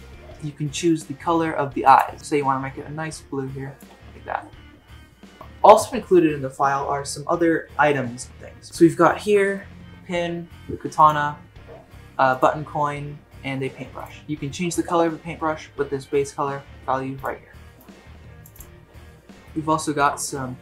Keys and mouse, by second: 2.2-3.8 drag, 9.6-9.9 shift+middle drag, 11.0 click, 17.2 click, 19.3 shift+middle drag, 19.8 shift+middle drag.